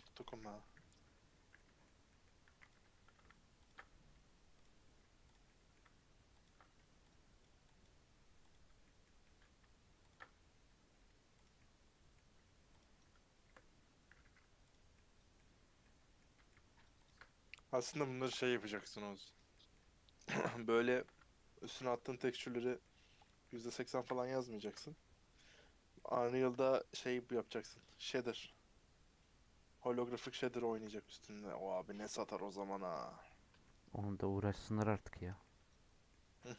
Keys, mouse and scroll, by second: 0.3 a, 1.5 middle click, 2.4 2, 2.7 click, 3.6 ctrl+click, 4.6 right click, 5.3 click, 5.4-6.4 middle drag, 6.4 ctrl+click, 7.8 right click, 8.5 click, 8.8-10.1 middle drag, 10.1 ctrl+click, 11.4 right click, 11.5-12.7 middle drag, 12.7 click, 14.2 3, 14.7 click, 14.9-17.0 middle drag, 17.0 shift+click, 18.3 2, 19.3 right click, 19.5 middle click, 20.3 click, 20.5-21.7 middle drag, 21.7 ctrl+click, 21.8 right click, 22.4 middle click, 23.2 click, 23.4-24.6 shift+middle drag, 24.6 ctrl+click, 25.9-27.7 middle drag, 27.7 right click, 28.4-31.8 middle drag, 31.8 scroll down 1, 32.0-35.2 shift+middle drag, 35.2 scroll down 1, 35.4 middle click, 36.2 scroll down 1, 36.3 middle click.